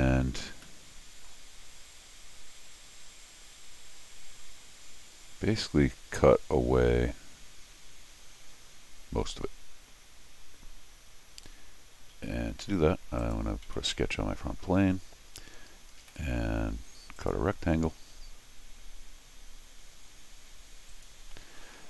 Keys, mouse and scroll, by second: 0.6 middle click, 1.6 scroll up 1, 1.7 middle click, 13.2 click, 13.7 c, 16.0 ctrl+r, 17.2 click, 20.9 click.